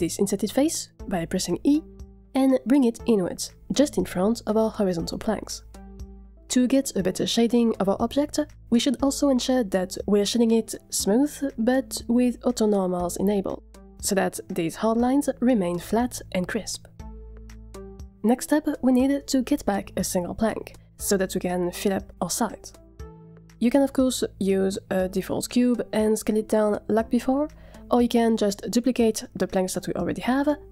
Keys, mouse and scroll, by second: 0.4 e, 5.6 Tab, 10.1 F3, 17.9 click, 18.7 z, 20.3-27.4 middle drag, 27.4 scroll down 4, 27.4 g, 27.5 g, 27.9 shift+middle click, 28.4 Tab, 28.6 middle click, 28.8 scroll up 2, 28.9 shift+middle click, 29.1 a, 29.4 a, 30.3 3.